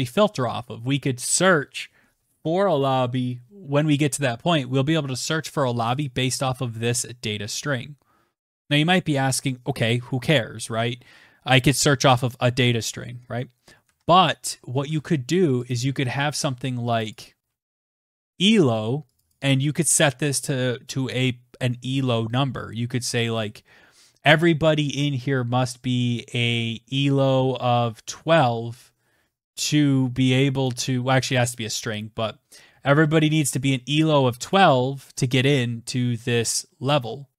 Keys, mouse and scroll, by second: 4.2 click, 4.4 click, 6.7 click, 12.2 ctrl+c, 12.6 click, 13.1 Return, 13.2 ctrl+v, 14.0 click, 14.2 click, 15.3 click, 15.5 click, 16.0-16.9 typing, 17.5 click, 17.6 click, 26.1-27.0 typing, 28.0 click, 29.0 click, 30.5 ', 30.8 Right, 31.0 Right, 31.5 ', 32.8 click, 35.9 ".